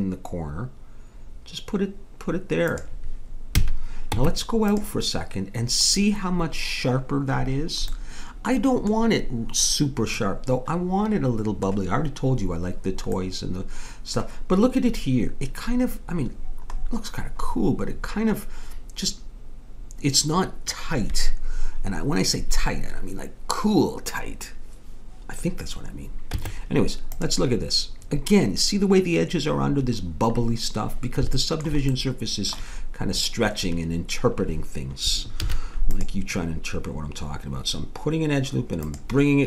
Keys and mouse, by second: 3.6 a, 4.1 Tab, 11.5-15.0 middle drag, 16.1 middle click, 26.3 Tab, 35.4 ctrl+r.